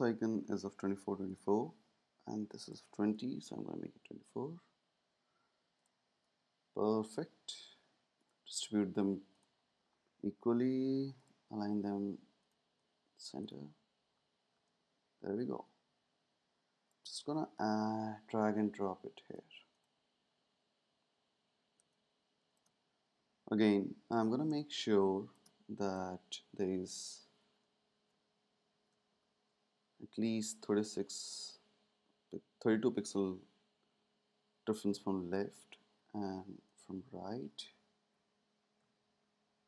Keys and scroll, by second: 3.4 Up, 3.5 Up, 14.6 space, 21.7 space, 27.7 space, 30.7 Right, 32.6 Left, 38.2 Right, 38.3 Right, 38.9 shift+Right, 39.5 shift+Right.